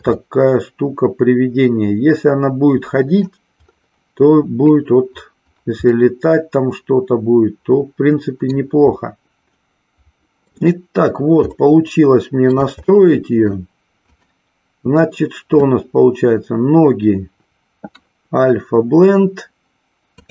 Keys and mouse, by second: 0.2-3.2 middle drag, 5.9-8.4 middle drag, 9.5-10.7 middle drag, 11.7 shift+middle click, 13.0 middle click, 14.2 click.